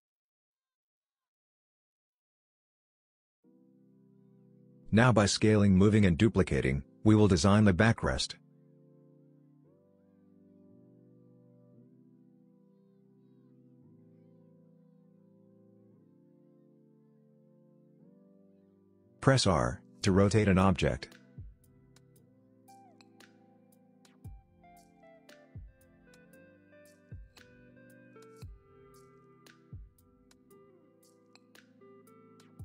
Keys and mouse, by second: 2.5 g, 4.1 g, 6.7 s, 10.7 g, 11.3 g, 12.2 g, 12.8 s, 13.8 shift+middle click, 14.0 middle click, 14.3 middle click, 14.6 s, 16.1 middle click, 16.6 click, 16.7 middle click, 17.2 g, 22.4 middle click, 23.0 g, 23.6 middle click, 23.9 middle click, 24.0 g, 24.7 middle click, 25.1 g, 25.7 KP_3, 26.0 g, 26.9 g, 27.7 middle click, 28.4 g, 29.3 middle click, 29.5 middle click, 30.4 shift+middle click, 31.2 r.